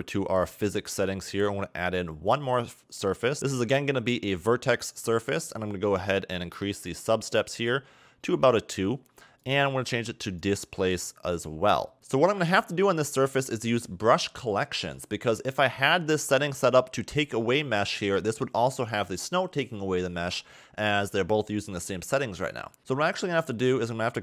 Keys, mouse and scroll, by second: 0.4 click, 2.3 click, 6.7 click, 7.3 click, 9.4 click, 12.5 click, 22.8-23.8 scroll down 1, 23.8-24.2 scroll up 1.